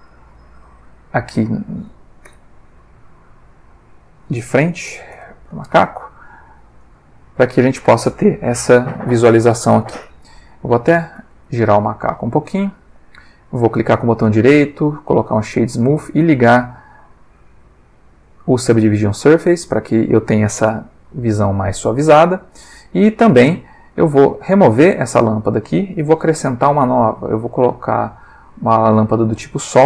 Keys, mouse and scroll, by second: 0.0 click, 2.3 n, 4.0 click, 4.9 0, 5.1 Return, 6.8 click, 10.7 click, 11.2 r, 12.8 click, 13.4 right click, 14.9 click, 16.2 click, 16.9 click, 18.0 click, 22.1-23.0 middle drag, 23.2 ctrl+middle click, 24.0 ctrl+click, 24.8 click, 24.8 x, 26.1 shift+a, 28.8 click, 29.7 g.